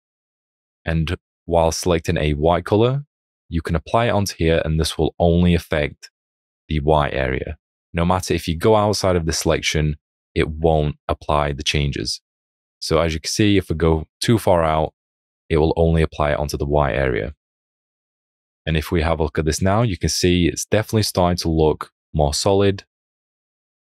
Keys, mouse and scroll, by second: 18.6 alt+click, 20.8 [.